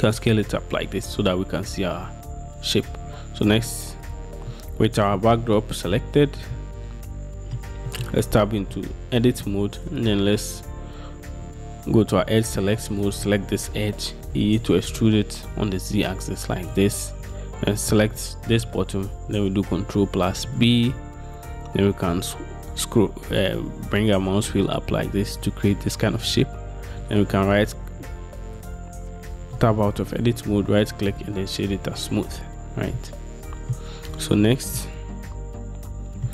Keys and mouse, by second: 4.2 click, 4.6-5.3 middle drag, 6.7-7.3 middle drag, 7.3-7.7 drag, 8.0 middle click, 9.2 Tab, 11.3 2, 14.4 e, 15.0 z, 20.6 ctrl+b, 27.3-28.8 drag, 29.7 Tab, 30.2-31.4 drag, 34.9-36.3 drag.